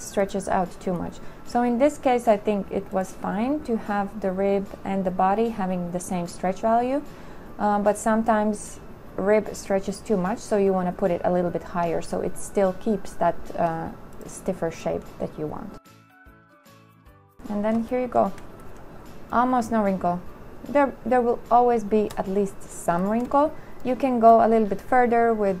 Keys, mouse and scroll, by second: 17.4 2, 18.1 shift+click, 18.4 middle click, 19.0 middle click, 20.4 middle click, 22.6-24.4 scroll.